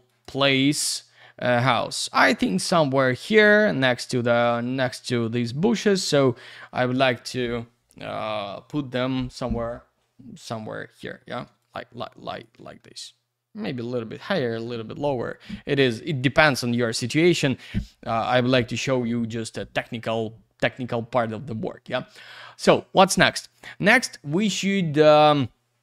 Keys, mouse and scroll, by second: 0.1 click, 0.4 click, 2.5 shift+middle click, 5.8 shift+middle click, 11.1 middle click, 11.6 click, 12.8 shift+middle click, 16.2 middle click, 16.6 shift+j.